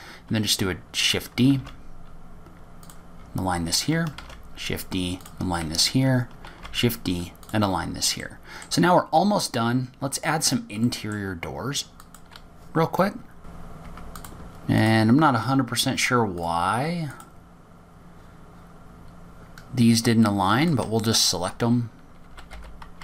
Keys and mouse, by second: 0.9 click, 2.9 shift+d, 5.7 shift+d, 8.0 shift+d, 9.6-10.1 middle drag, 12.3 middle click, 13.4 click, 13.6 Delete, 13.8 Delete, 13.8 click, 14.0 click, 14.9-15.5 drag, 18.5 click, 22.5 shift+click.